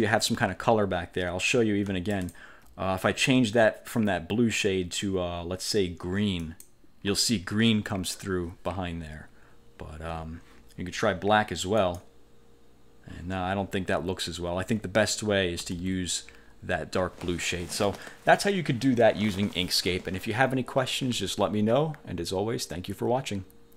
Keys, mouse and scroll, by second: 2.2 alt+click, 6.6 click, 11.9 click, 14.8 ctrl+z, 15.7 ctrl+z, 22.8 click.